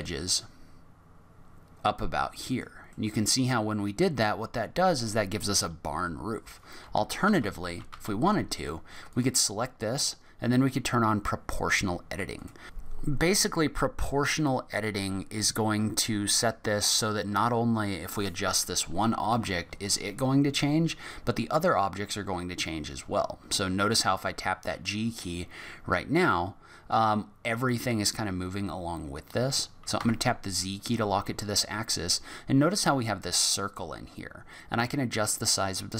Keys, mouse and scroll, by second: 2.9 middle click, 6.8 ctrl+z, 7.2 ctrl+z, 7.6 ctrl+z, 7.9 ctrl+z, 9.1 click, 12.3 click, 19.3 g.